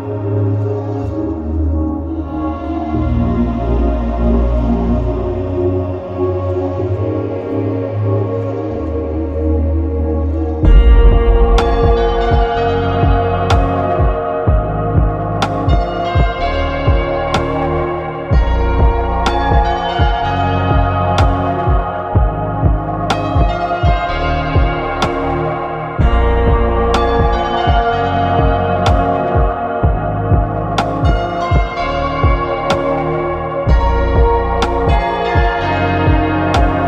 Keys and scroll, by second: 1.9 Escape, 7.1 ctrl+c, 7.5 ctrl+Down, 10.2 ctrl+Down, 23.8 ctrl+a, 25.8 Escape, 31.4 Escape.